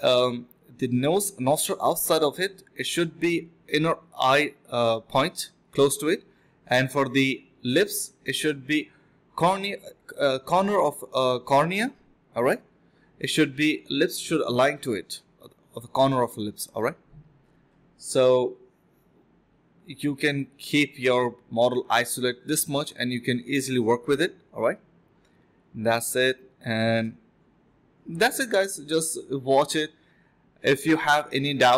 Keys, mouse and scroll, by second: 2.5-3.5 typing, 7.1 alt+click, 7.5 alt+click, 7.8 alt+click, 8.2 q, 12.6 alt+click, 13.1 alt+click, 13.7-14.0 typing, 15.2 alt+click, 15.4 alt+click, 16.2 f, 17.0 ctrl+shift+click, 18.5 ctrl+shift+q, 22.9 alt+click, 23.1 alt+click, 23.2 alt+click, 23.7 f, 24.0 alt+click, 24.2 alt+click, 24.3 alt+click, 25.9 alt+click, 26.8 alt+click, 27.0 alt+click, 29.6 ctrl+z, 31.6 alt+click.